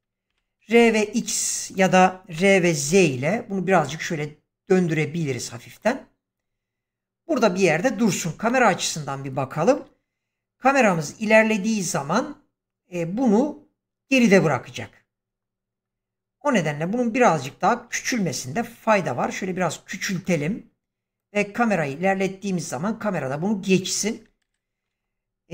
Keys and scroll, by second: 0.2-0.7 typing, 2.2 r, 2.7 z, 18.5 s, 24.4 shift+Left.